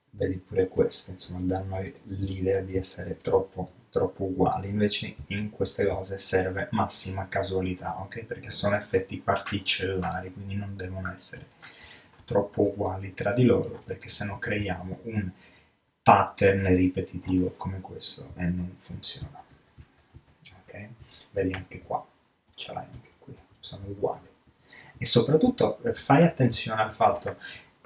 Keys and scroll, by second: 4.6 alt+super+z, 18.4 alt+super+z, 24.0 alt+super+z.